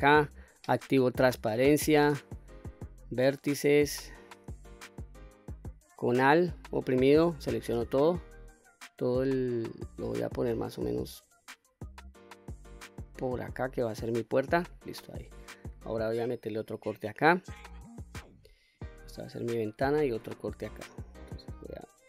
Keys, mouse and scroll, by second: 0.2 q, 1.5 2, 1.9 click, 5.3 alt+click, 9.1-14.5 drag, 16.1 ctrl+r, 18.8 click, 19.9 ctrl+r.